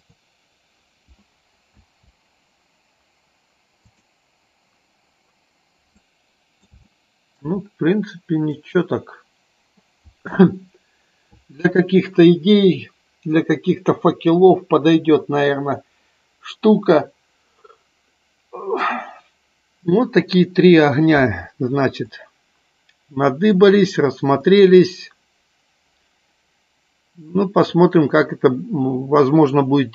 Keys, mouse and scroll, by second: 0.0 click, 1.7 space, 6.0 middle click, 6.7 shift+middle click, 8.5 middle click, 9.6 middle click, 22.1-23.5 middle drag, 24.3-27.6 middle drag.